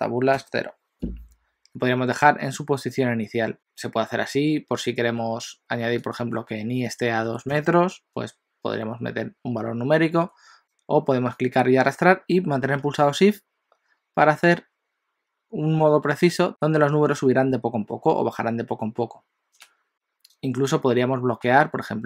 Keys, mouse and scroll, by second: 6.0 click, 10.6 click, 11.4 click.